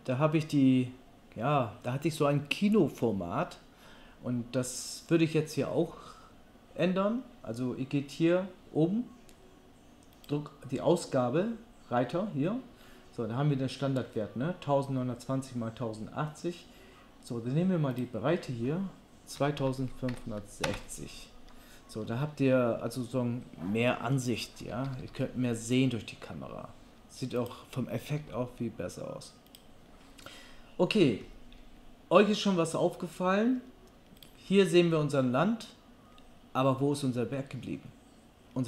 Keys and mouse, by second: 18.1-27.5 drag, 24.6 g, 27.5-38.6 middle drag, 28.2 g.